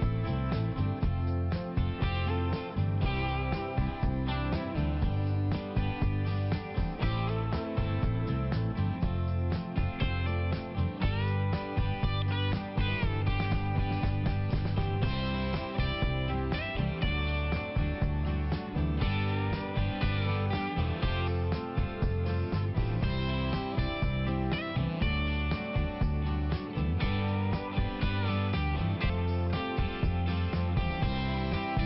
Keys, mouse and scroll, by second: 0.0 click, 0.4 click, 0.7 click, 0.9 click, 1.1 click, 1.2 double click, 1.3 double click, 1.5 double click, 1.7 double click, 1.8 double click, 2.4 double click, 2.5 double click, 2.8 double click, 3.5 click, 4.7 click, 5.5 click, 5.6 click, 5.8 click, 6.0 double click, 6.2 double click, 6.6 double click, 6.7 double click, 6.9 double click, 7.3 double click, 7.5 double click, 7.6 double click, 7.9 double click, 8.0 double click, 8.4 double click, 11.3 click, 12.1 click, 12.2 click, 12.6 click, 12.7 double click, 12.8 double click, 13.1 double click, 13.2 double click, 13.3 double click, 13.8 double click, 13.9 double click, 14.0 double click, 14.4 double click, 14.5 double click, 14.8 double click, 15.7 typing, 16.1 click, 16.6 click, 16.8 click, 16.9 double click, 17.1 double click, 17.4 double click, 17.5 double click, 17.8 double click, 18.1 double click, 18.2 double click, 18.5 double click, 18.9 double click, 19.1 double click, 19.2 click, 19.6 click, 19.7 double click, 20.3 double click, 21.5 click, 23.4 click, 23.8 click, 23.9 double click, 24.2 double click, 24.5 double click, 24.6 double click, 24.9 double click, 25.2 double click, 25.2 double click, 25.5 double click, 25.8 double click, 25.8 double click, 26.1 double click, 26.3 double click, 26.5 double click, 26.7 double click, 27.0 double click, 27.1 double click, 27.4 double click, 28.9 click, 28.9 [, 29.3 click, 29.8 click, 30.1 click, 30.3 click, 30.5 double click, 30.6 double click, 30.9 double click, 31.0 double click, 31.5 double click.